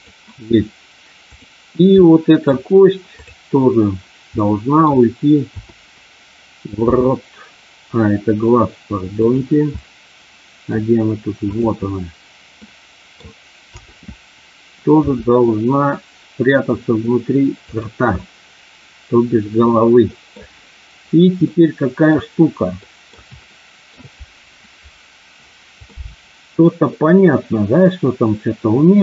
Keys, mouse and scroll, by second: 0.0 click, 1.2 click, 2.0 middle click, 3.1 click, 4.4 middle click, 5.5 KP_7, 6.9 r, 9.3 click, 9.8 middle click, 12.6 middle click, 13.6 KP_7, 15.0 r, 17.6 click, 18.1-20.3 middle drag, 21.4 middle click, 22.9 middle click, 23.4 shift+middle click, 25.9-29.0 middle drag.